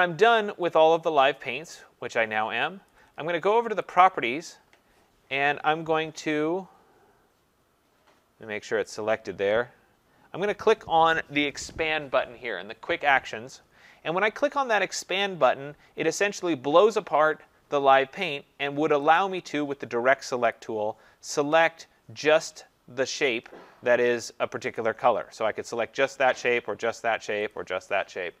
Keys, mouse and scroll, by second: 0.0-2.3 click, 0.5 scroll, 1.0 scroll, 2.9 click, 3.9 click, 4.0 click, 8.9 click, 16.9 click, 19.2 click, 20.5 click, 24.8 click, 26.4 click, 27.5 click.